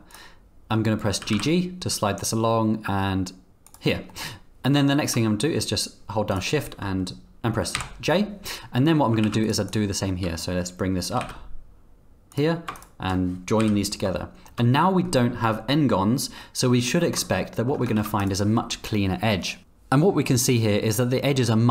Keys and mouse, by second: 0.1 click, 1.2 g, 3.5 g, 4.1 click, 6.3 shift+click, 7.4 ctrl+j, 9.2 ctrl+r, 9.7 click, 10.1 click, 11.1 g, 12.8 shift+click, 13.6 j, 14.2 shift+click, 16.4 middle click, 17.0 shift+middle click, 17.4 middle click, 17.7 Tab, 17.9 z, 19.6 z.